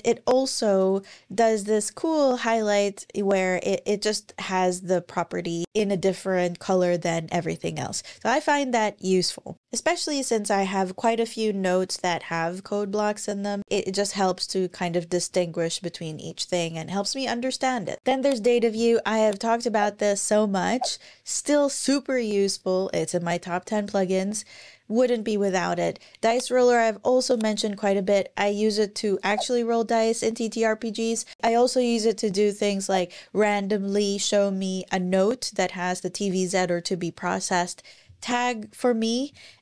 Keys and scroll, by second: 6.7 Right, 7.2 Down, 7.4 Down, 7.7 Down, 8.0 Down, 17.6 super+,.